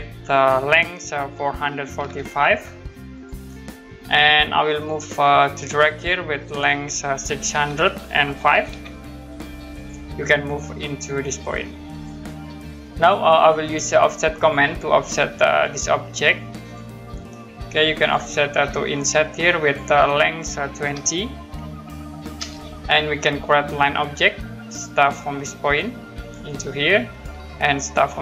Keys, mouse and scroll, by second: 1.5 4, 2.9-3.6 typing, 3.1 click, 3.5-4.8 scroll up 1, 4.8 middle click, 5.1-6.3 scroll up 1, 7.5 6, 9.8 click, 11.9 click, 12.9 Escape, 14.3 click, 20.8 typing, 22.4 Return, 24.7 click, 26.2 click.